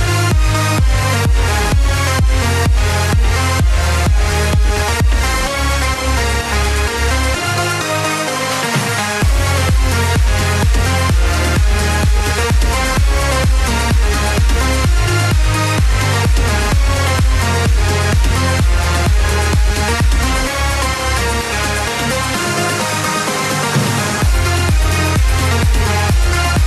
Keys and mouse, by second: 0.4 click, 0.7 middle click, 6.4 r, 8.1 click, 12.3 e, 15.9 click, 18.3 s, 20.3 click, 23.1 click, 25.3 alt+click.